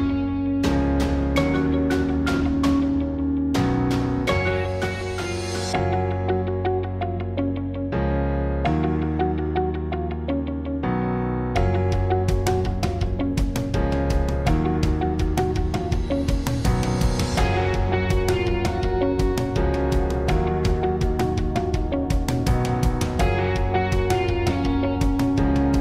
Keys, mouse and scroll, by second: 0.2 Tab, 0.6 ctrl+r, 2.2 ctrl+r, 3.2 click, 3.6 ctrl+r, 4.7 ctrl+r, 6.2 ctrl+r, 7.2 ctrl+r, 7.4 click, 9.0-10.4 drag, 10.4 Tab, 12.9 Tab, 14.0 Tab, 14.4 Tab, 15.4 space, 16.9 s, 17.9-19.2 right drag, 19.6 click, 20.1 click, 21.0 click, 22.0 click, 23.9 s, 24.1 click, 24.5 click, 24.8 middle click, 24.9 click.